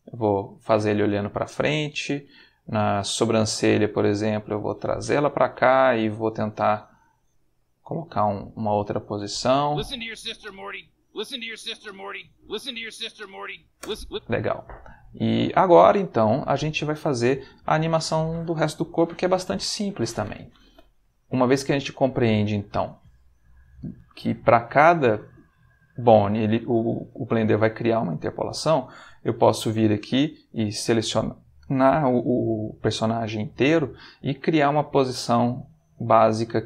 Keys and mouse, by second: 0.4 space, 2.0 click, 2.8 click, 3.7 g, 4.6 space, 6.5-8.7 drag, 9.6 space, 13.8 space, 14.3 ctrl+middle click, 15.0 ctrl+middle click, 15.7-17.1 ctrl+shift+middle drag, 19.5 click, 30.5 a.